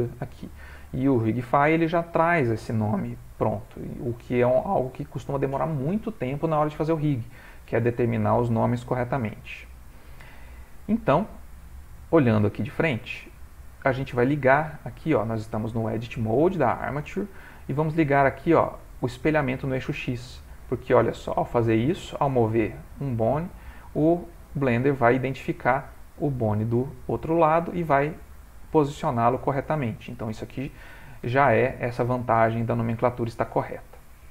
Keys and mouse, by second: 12.3 click, 19.1 click, 20.6 click, 21.1 g, 24.3 click, 24.7 g, 31.3 ctrl+middle click, 32.0 shift+middle click.